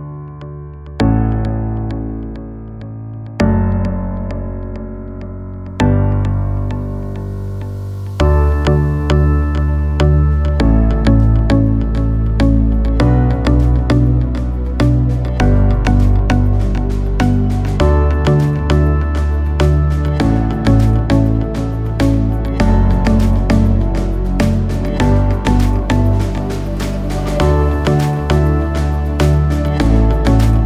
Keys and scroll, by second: 8.0 j.